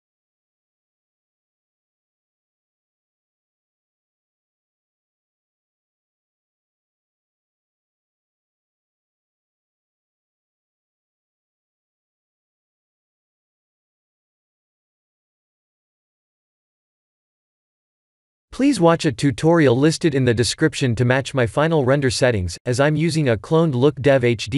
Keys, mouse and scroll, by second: 0.7 KP_0, 4.5 g, 10.6 g, 15.7 g.